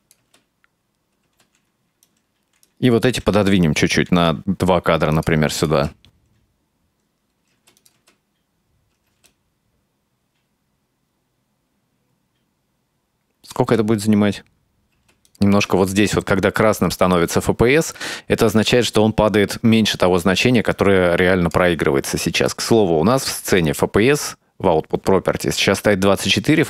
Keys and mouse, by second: 0.3 space, 1.3 space, 2.1-2.8 right drag, 4.1 g, 5.6 click, 5.8 space, 7.6 space, 7.8 click, 8.0 space, 9.1 space, 9.3-13.6 drag, 13.6 space, 15.0 space, 15.5 space, 18.3 space, 20.8-21.6 drag, 22.5 click, 23.6 click.